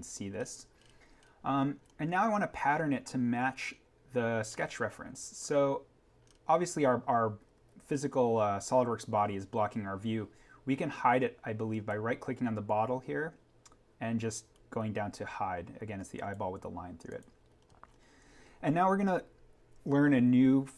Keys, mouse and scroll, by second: 0.3-1.8 scroll up 1, 7.5 alt+v, 7.9-9.7 scroll up 1, 10.8-11.7 scroll down 1, 11.7 right click, 16.1 click, 17.5-17.8 scroll down 1.